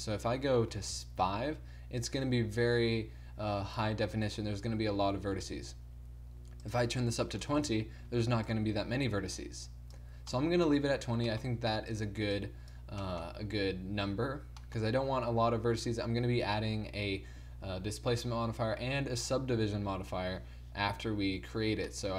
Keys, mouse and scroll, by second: 5.5 ctrl+z, 10.4-11.6 middle drag, 11.6 f, 12.4-14.7 drag.